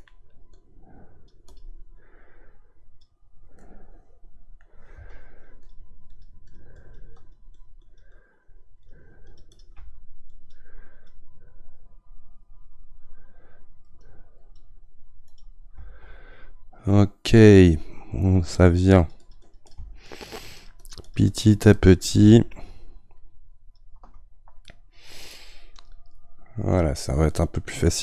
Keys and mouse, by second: 0.8-2.1 right drag, 2.1-3.6 drag, 3.6-5.6 middle drag, 5.6-24.7 shift+drag, 24.7-28.0 middle drag.